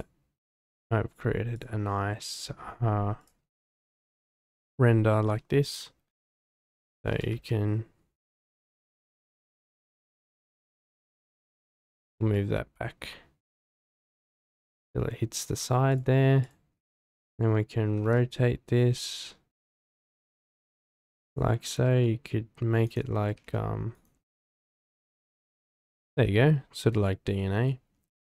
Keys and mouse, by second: 0.4 g, 0.5 z, 2.3-3.6 drag, 4.2 click, 5.7 click, 6.2 click, 7.1 g, 7.3 y, 9.4 g, 9.5 z, 10.8 click, 11.7 click, 12.0 g, 12.2 y, 15.9 click, 17.8 r, 17.9 z, 21.2 click, 21.7 r, 21.9 r, 23.2 r, 23.3 x, 24.3 click, 28.1 click.